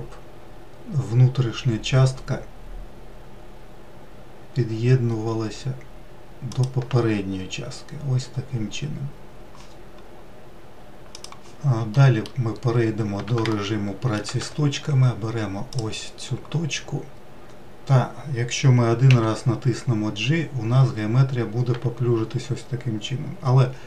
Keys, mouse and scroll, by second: 11.5 middle click, 12.4-13.1 scroll up 2, 13.1 shift+middle click, 13.9 1, 15.3-16.7 drag, 16.7-18.2 scroll up 1, 18.2-18.6 scroll up 1, 18.6 g.